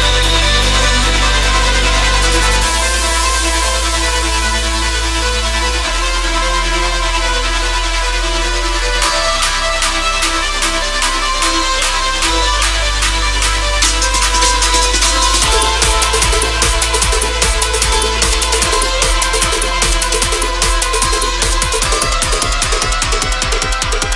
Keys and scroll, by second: 1.3 space, 4.8 space, 6.0 space, 12.0 space, 18.8 [, 20.5 [, 21.6 space, 22.2 ], 23.4 space.